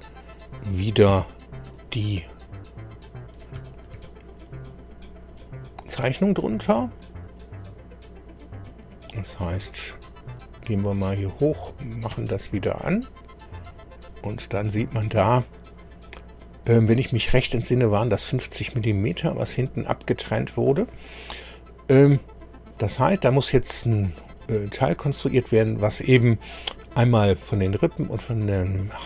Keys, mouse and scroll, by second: 1.1 KP_2, 2.9 click, 3.9 ctrl+d, 5.2-7.2 drag, 9.9 click, 10.6-11.4 scroll up 4, 11.7 click, 12.1 space, 12.8 shift+click, 13.8-14.5 shift+scroll up 5, 15.2 scroll up 2, 15.8-16.2 scroll down 2, 19.2-20.2 scroll up 3, 24.4-24.7 scroll down 1, 25.0-25.3 scroll down 1.